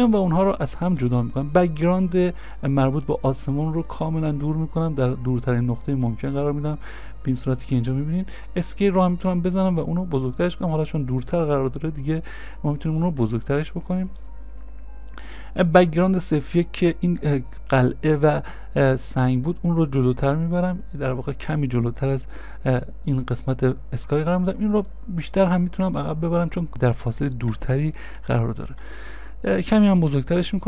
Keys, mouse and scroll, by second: 0.9-1.8 scroll, 6.5 v, 6.5 scroll down 1, 7.1 middle click, 8.4 s, 24.9 s, 25.0 middle click, 27.7 shift+click.